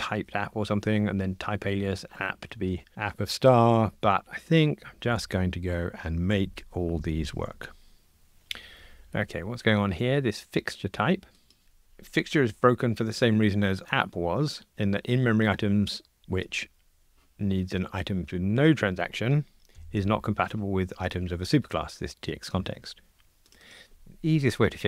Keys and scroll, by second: 11.6 super+b, 16.6 super+b.